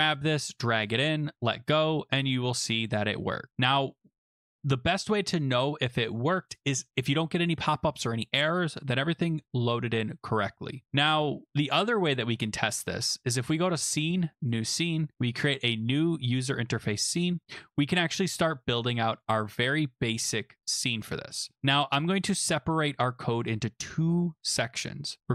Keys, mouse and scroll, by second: 0.8 click, 1.9 click, 5.1 click, 5.5 click, 6.5 click, 6.9 click, 13.7 click, 14.5 click, 15.7 click, 18.1 click, 19.2 click, 20.6 click, 22.1-22.6 scroll.